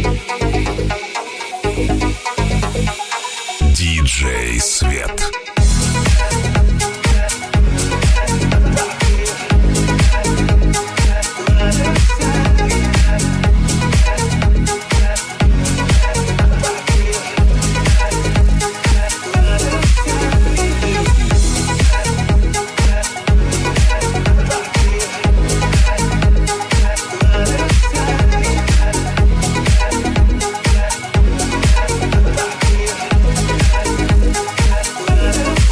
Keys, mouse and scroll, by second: 0.5 ctrl+z, 6.3 click, 6.3 3, 6.6 click, 6.8 click, 7.0 click, 7.6 shift+click, 7.7 shift+middle click, 8.4 right click, 8.4 shift+middle click, 8.6 shift+right click, 8.7 shift+middle click, 8.8 shift+right click, 8.9 shift+middle click, 9.0 shift+right click, 9.0-13.1 shift+middle drag, 10.7 i, 10.7 w, 11.4 s, 13.1 shift+right click, 13.1 shift+middle click, 13.3 shift+right click, 13.4 shift+middle click, 13.6 shift+right click, 13.7 shift+middle click, 13.9 shift+right click, 14.0-15.1 shift+middle drag, 15.1 right click, 15.1 1, 15.7 shift+middle click, 16.1 right click, 16.2-20.0 middle drag, 17.0 j, 18.4 right click, 18.9 shift+right click, 19.7 j, 19.7 3, 20.0 right click, 20.1 middle click, 20.3 right click, 20.3 shift+middle click, 20.5 shift+right click, 20.6 shift+middle click, 20.7 shift+right click, 20.9 shift+middle click, 21.1 right click, 21.2 middle click, 21.3 right click, 21.4 middle click, 21.5 shift+right click, 21.8 shift+middle click, 22.0 shift+right click, 22.1 shift+middle click, 22.4 shift+right click, 22.5-23.7 shift+middle drag, 23.7 shift+right click, 23.7 shift+middle click, 24.0 shift+right click, 24.1-35.3 shift+middle drag, 24.6 shift+right click, 25.1 shift+right click, 26.4 alt+e, 30.0 i, 31.0 ctrl+r, 32.2 ctrl+r, 35.3 click, 35.3 3, 35.4 shift+middle click, 35.6 shift+click, 35.6 shift+middle click.